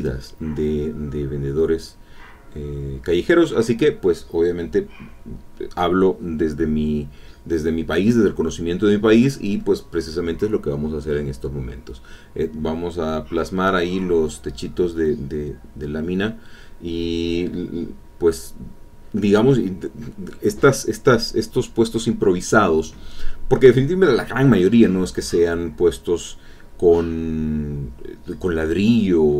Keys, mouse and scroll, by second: 0.4 click, 2.3-4.3 shift+drag, 6.0-8.7 shift+drag, 13.6 click, 19.7 click, 22.2 click, 24.1 click, 25.1 click, 26.7-27.9 drag.